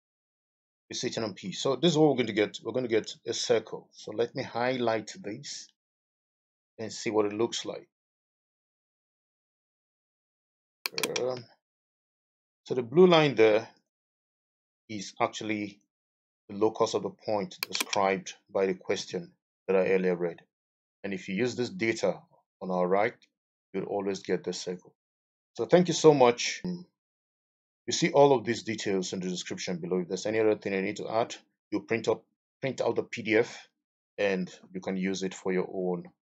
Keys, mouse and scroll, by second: 3.0 Return, 4.6 middle click, 6.3 middle click, 11.9 Escape, 18.9 Escape, 25.0 middle click.